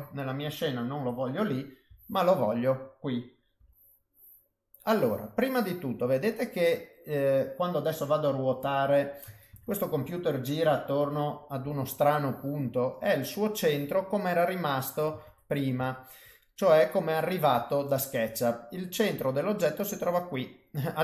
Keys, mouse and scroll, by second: 0.1 middle click, 0.9 KP_7, 1.8 g, 3.6 r, 9.5 ctrl+z, 11.6 g, 13.9 middle click, 15.2 ctrl+z, 15.8 ctrl+z, 16.4 middle click, 17.7 middle click, 20.2 middle click.